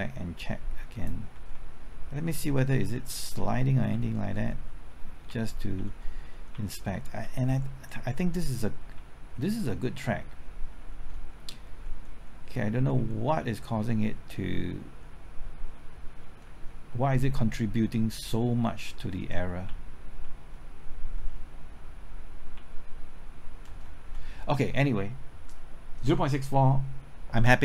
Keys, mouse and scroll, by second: 1.3 Right, 1.5-2.5 typing, 2.5 Left, 5.1-6.0 typing, 16.4 Right, 18.5 Right, 19.4 typing, 19.6 Left, 22.3-24.1 typing.